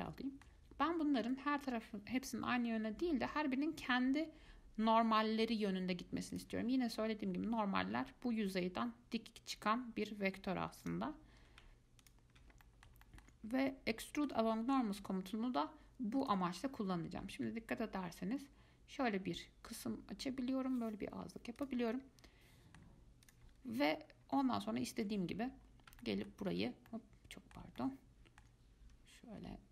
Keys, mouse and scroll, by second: 1.4-6.5 right drag, 6.5 click, 11.0 click, 12.2 alt+click, 12.8-15.2 middle drag, 15.2-18.3 right drag, 22.1-23.4 middle drag, 23.4 click, 23.8 middle click, 23.8-24.3 scroll up 1, 24.3 scroll down 2, 24.8-25.8 alt+right drag, 25.8 scroll up 1, 26.2 alt+middle click, 27.1-29.7 middle drag.